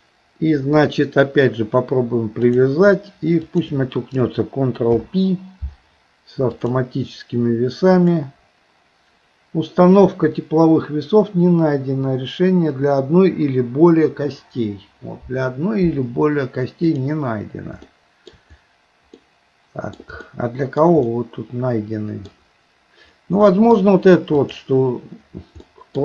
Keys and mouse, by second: 3.4 shift+click, 4.9 ctrl+p, 8.0 click, 17.9 shift+middle click, 19.2 middle click, 20.3 shift+middle click, 21.1-22.3 middle drag, 23.5 middle click, 25.7 middle click.